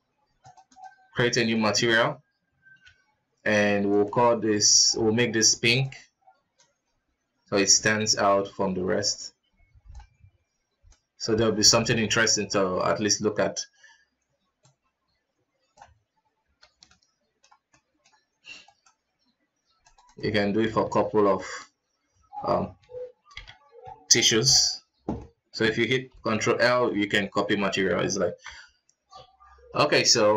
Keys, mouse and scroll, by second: 0.4-2.8 drag, 2.8 z, 4.7 ctrl+s, 5.8 click, 10.9 click, 12.0 alt+a, 12.8 right click, 14.6-16.8 drag, 16.8-18.7 middle drag, 18.7 right click, 19.8-21.2 drag, 21.2 shift+right click, 25.1-26.2 middle drag, 26.2 ctrl+l, 27.7 alt+a, 28.5 KP_0, 29.1-29.5 scroll up 2, 29.7 scroll down 2, 30.2 ctrl+s.